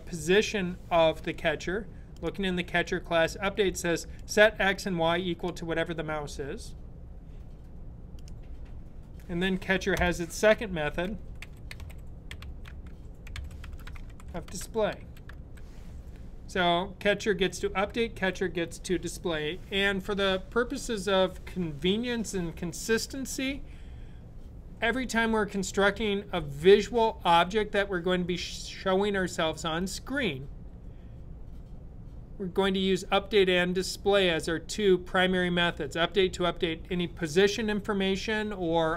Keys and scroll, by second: 10.5-15.7 typing.